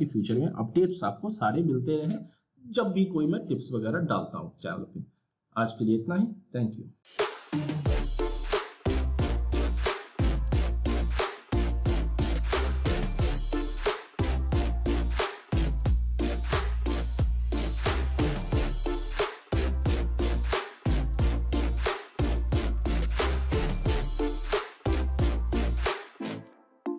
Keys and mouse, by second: 5.9 click.